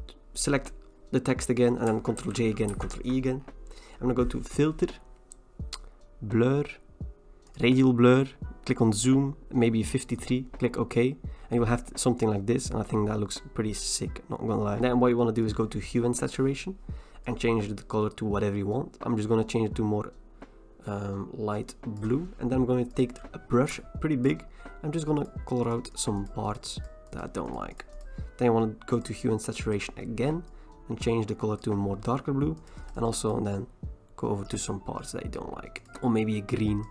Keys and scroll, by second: 2.2 ctrl+j, 2.7 ctrl+e.